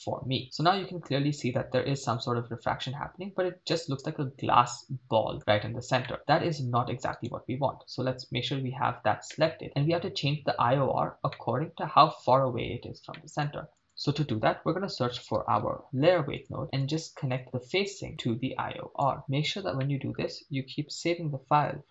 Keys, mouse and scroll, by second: 0.1-0.6 scroll up 3, 0.4-5.4 middle drag, 6.1 middle click, 7.3-8.6 right drag, 9.3 middle click, 11.4 middle click, 13.1 middle click, 13.7 shift+a, 17.7-19.2 drag, 19.2 middle click, 19.8 middle click.